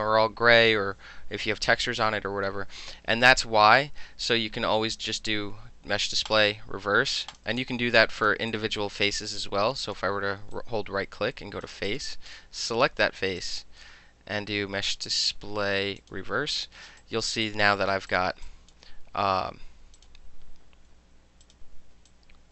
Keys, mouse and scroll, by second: 6.3 click, 7.4 click, 7.6 alt+click, 8.2 click, 8.6 right click, 9.9 click, 10.6-11.7 right drag, 11.9 click, 13.4 click, 16.0 click, 16.6 click, 17.0 alt+click, 17.5 right click, 18.0 middle drag, 18.1 click, 18.2 alt+middle drag, 18.5 alt+click, 18.8-20.0 alt+middle drag, 20.0 click, 21.5 click, 22.1 alt+click.